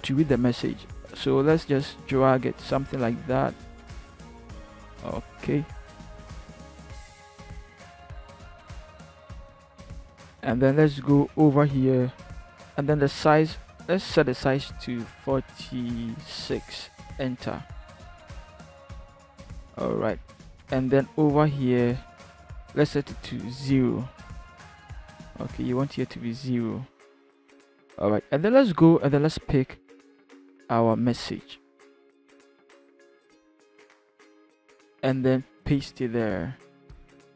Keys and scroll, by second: 14.9 4, 16.4 6, 17.0 Return, 23.4 0, 23.9 Return, 32.3 ctrl+c, 35.6 ctrl+v.